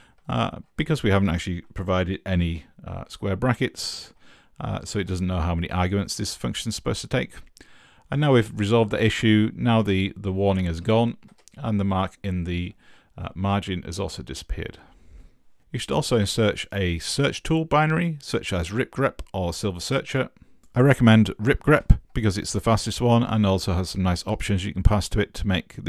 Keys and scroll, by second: 0.0-2.3 typing, 3.9 Right, 4.9 Right, 9.8 Up, 10.3 Left, 10.4 Left, 10.7 Left, 11.0-11.8 typing, 20.6-22.5 typing.